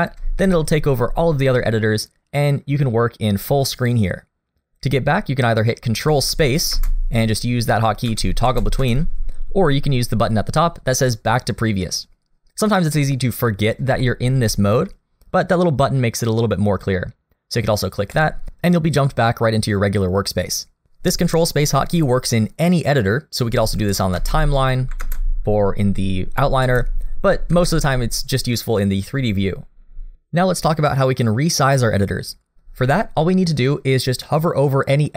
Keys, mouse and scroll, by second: 0.4 shift+middle click, 1.7 middle click, 6.8 ctrl+space, 8.1 ctrl+space, 8.5 ctrl+space, 8.8 ctrl+space, 13.0 middle click, 14.0 shift+middle click, 18.1 click, 25.1 ctrl+space, 27.6 ctrl+space.